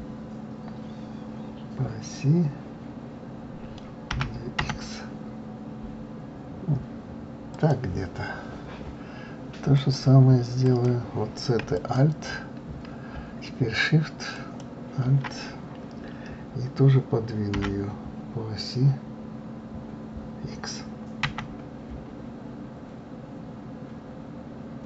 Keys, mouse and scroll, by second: 9.7 click, 10.6 click, 11.7 alt+click, 14.3 alt+shift+click.